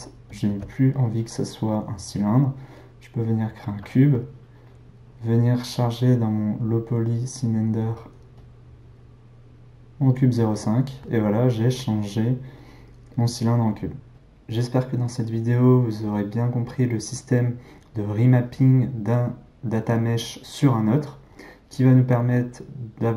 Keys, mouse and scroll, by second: 0.4 shift+a, 5.8 click, 8.3 click.